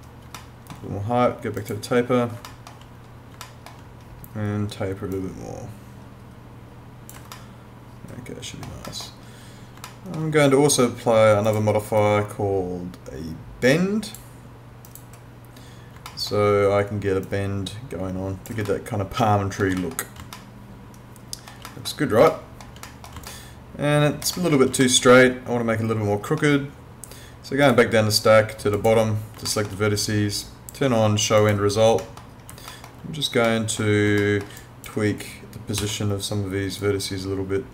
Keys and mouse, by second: 0.4 alt+middle click, 1.6 click, 2.5 alt+middle click, 3.4 alt+middle click, 5.2 click, 7.3 alt+middle click, 9.9 alt+middle click, 11.5 click, 14.9 click, 16.1 alt+middle click, 17.3 click, 18.7 alt+middle click, 20.3 alt+middle click, 22.3 alt+middle click, 23.3 alt+middle click, 24.8 alt+middle click, 27.6 click, 29.5 alt+middle click, 31.4 click, 32.0 middle click, 32.7 alt+middle click, 34.2 alt+middle click, 34.6 click, 35.8 w, 36.8 click.